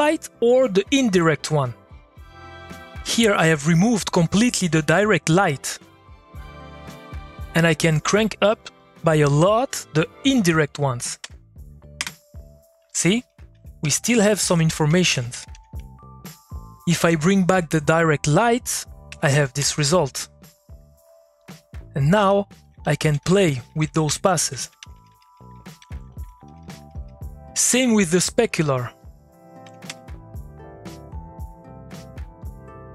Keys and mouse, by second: 1.2-4.2 drag, 6.5 click, 8.6 click, 13.3 Left, 13.8 Up, 14.5 Down, 18.2 click, 22.2 Left, 22.6 Down, 29.0 click, 31.2 click.